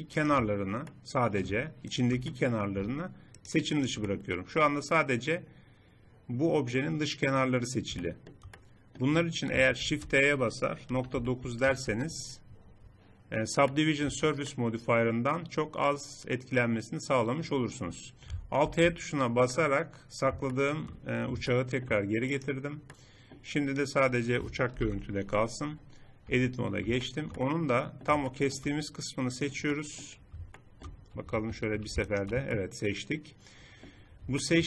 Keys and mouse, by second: 0.5 middle click, 2.5-5.9 drag, 8.0-9.8 drag, 9.8 shift+e, 14.1 Tab, 18.6 alt+h, 24.8 shift+h, 26.3 Tab, 29.8-31.2 drag, 31.2 middle click, 31.4 a, 31.6 a.